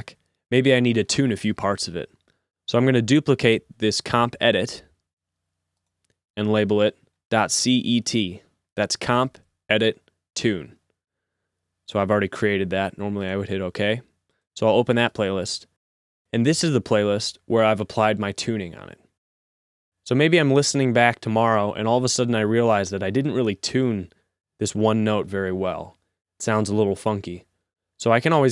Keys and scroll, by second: 7.0 Right, 7.2 BackSpace, 7.5 BackSpace, 8.4 t.